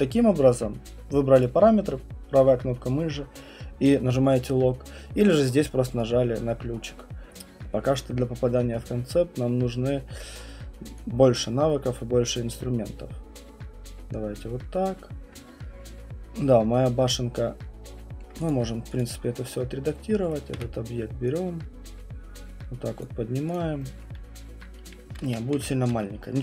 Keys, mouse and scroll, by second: 0.2 alt+middle click, 1.4 right click, 7.2 alt+middle click, 7.2 alt+click, 11.4 alt+click, 14.1 alt+middle click, 18.2 alt+middle click, 18.5 click, 19.0 click, 20.3 right click, 20.5 w, 23.0 click, 23.5 click, 24.1 alt+middle click, 25.2 ctrl+z, 25.5 ctrl+z, 26.2 middle click.